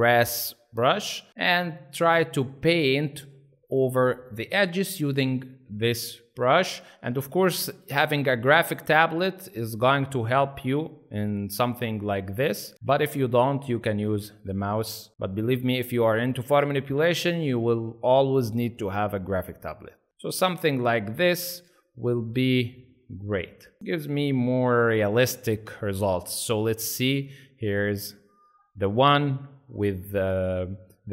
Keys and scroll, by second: 1.3 space, 2.7 ctrl+z, 3.1 ctrl+x, 4.6 [, 4.8 [, 11.6 space, 12.4 ctrl+z, 12.7 space, 16.6 space, 20.1 space, 21.5 ctrl+z, 23.8 space, 23.9 z.